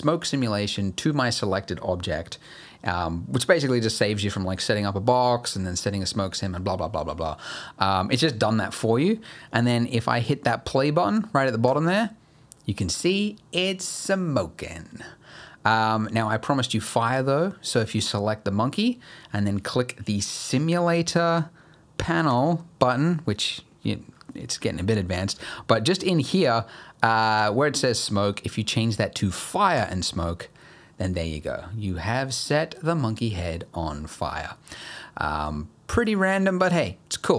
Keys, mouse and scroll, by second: 11.7 click, 11.7-13.7 scroll down 1, 15.2 scroll up 1, 15.4 middle click, 17.0 click, 22.3 click, 23.8-24.3 scroll down 5, 25.3-27.4 scroll down 1, 27.4 click, 34.5-35.2 scroll down 5, 35.2 middle click, 35.5-36.1 scroll up 3, 36.1 middle click, 36.6 middle click, 37.1 scroll up 1.